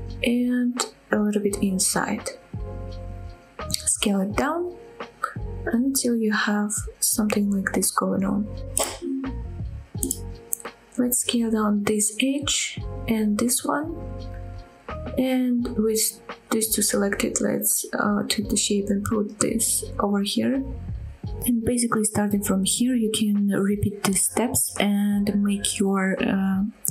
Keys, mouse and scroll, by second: 0.4 middle click, 1.0 g, 3.3 click, 3.5 middle click, 3.9 s, 4.7 click, 4.8 g, 5.3 click, 5.5 middle click, 5.9 scroll up 2, 6.1 middle click, 6.7 g, 7.8 click, 8.0 middle click, 8.5 g, 9.1 click, 9.2 middle click, 9.9 scroll down 1, 10.1 middle click, 10.8 middle click, 11.0 middle click, 11.5 middle click, 12.0 click, 12.2 middle click, 12.7 s, 13.3 click, 13.5 middle click, 13.9 click, 14.1 s, 14.8 click, 15.0 middle click, 15.5 click, 15.8 shift+click, 16.4 KP_7, 16.8 scroll up 1, 17.0 shift+middle click, 17.6 g, 20.8 click, 21.5 middle click, 22.0 scroll down 1, 22.2 click, 22.3-26.2 typing, 22.5 middle click, 22.8 middle click, 22.8 click, 23.1 scroll down 2, 23.2 middle click, 23.3 scroll up 2, 23.4 click, 23.4 middle click, 23.9 click, 23.9 middle click, 24.3 click, 24.5 click, 24.6 middle click, 25.0 middle click, 25.2 click, 25.2 shift+middle click, 25.9 ctrl+z, 26.3 middle click, 26.3 shift+click, 26.7 middle click.